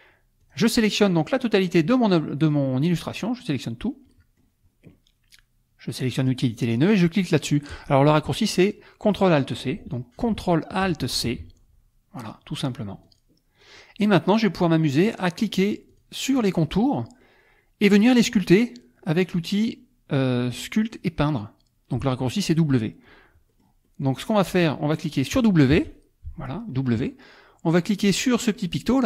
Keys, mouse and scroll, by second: 0.4 click, 0.8 click, 1.6-3.7 drag, 4.1 middle click, 6.1 click, 11.1 alt+shift+c, 13.1 click, 13.6 click, 15.9 click, 23.5 middle click, 23.9 middle click, 24.3 middle click, 25.7 w.